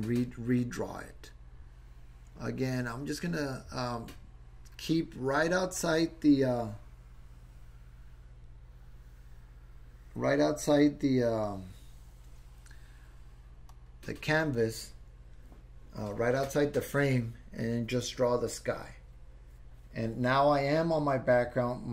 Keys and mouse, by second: 1.3-14.1 drag.